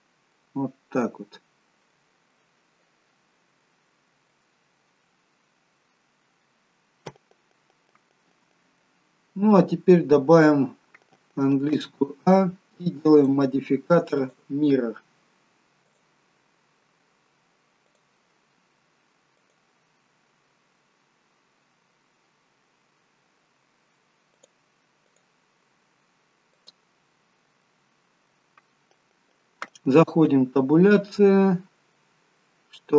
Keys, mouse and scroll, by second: 0.7 scroll up 2, 1.0 middle click, 2.4 middle click, 3.9-4.3 scroll up 1, 4.3 middle click, 6.8 scroll down 2, 7.9 middle click, 11.8 a, 13.1 click, 14.3 click, 16.7-17.2 scroll down 1, 17.9 click, 19.4 click, 24.4 click, 26.8 click, 27.3-27.7 scroll up 2, 27.7 middle click, 30.1 Tab, 31.2 middle click, 32.3-32.8 scroll down 1, 32.8 middle click.